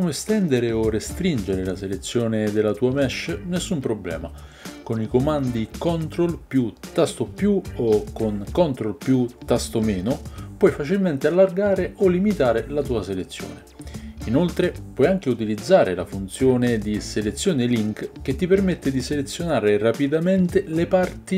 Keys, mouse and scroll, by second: 2.8 ctrl+KP_Add, 3.4 ctrl+KP_Add, 4.0 ctrl+KP_Add, 4.6 ctrl+KP_Add, 5.2 ctrl+KP_Add, 5.6 ctrl+KP_Add, 5.9 ctrl+KP_Add, 10.9 ctrl+KP_Subtract, 11.2 ctrl+KP_Subtract, 11.6 ctrl+KP_Subtract, 11.8 ctrl+KP_Subtract, 12.1 ctrl+KP_Subtract, 12.4 ctrl+KP_Subtract, 12.8 ctrl+KP_Subtract, 13.1 ctrl+KP_Subtract, 13.4 ctrl+KP_Subtract, 14.2 ctrl+KP_Subtract.